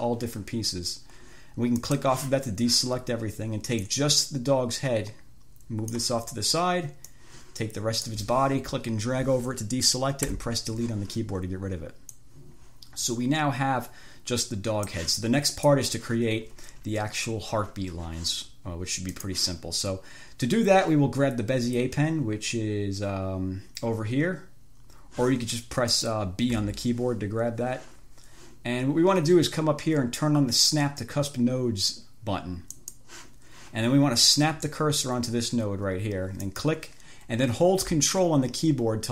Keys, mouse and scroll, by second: 2.0 click, 4.0-6.4 drag, 7.3-8.5 drag, 10.5 Delete, 12.5-15.4 drag, 15.8 click, 19.5 click, 26.2 click, 26.8 b, 33.0 click, 36.7 click.